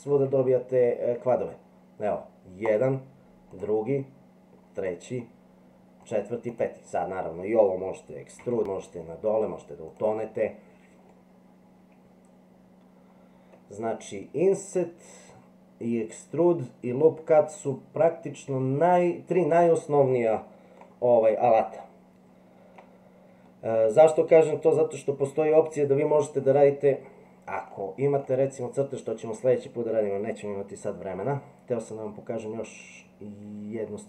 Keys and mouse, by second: 0.4 shift+middle click, 2.6 click, 3.5 click, 4.7 click, 6.0 click, 6.4 click, 8.4 e, 11.3-12.7 middle drag, 13.1 middle click, 20.8-22.9 middle drag.